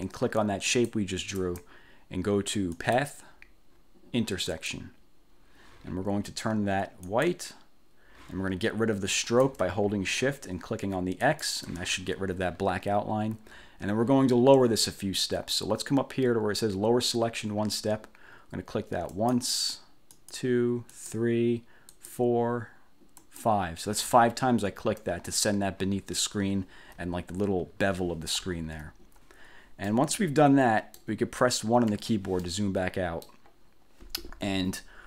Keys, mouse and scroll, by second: 0.8 shift+click, 2.8 click, 4.6 click, 7.2 click, 11.4 shift+click, 19.3 click, 20.3 click, 21.0 click, 22.0 click, 23.4 click, 26.7-27.0 ctrl+scroll up 2, 28.7 ctrl+scroll down 2, 30.0-31.3 drag, 32.0 1, 32.6-33.6 drag.